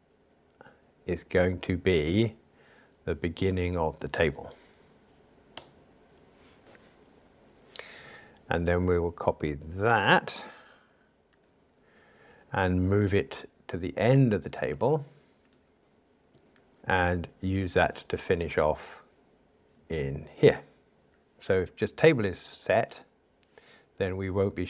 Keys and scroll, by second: 4.2 super+v, 11.3 super+c, 16.5 super+v.